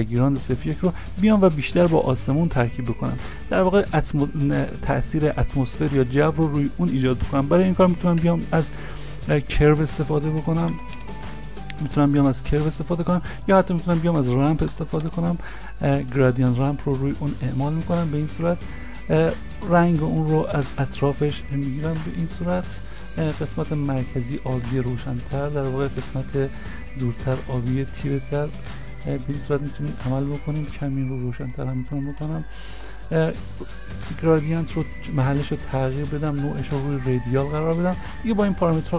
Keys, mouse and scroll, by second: 8.2 middle click, 10.4 u, 10.4 r, 10.7 v, 11.0 e, 14.2 a, 14.7 m, 15.1 p, 38.9 p, 38.9 m.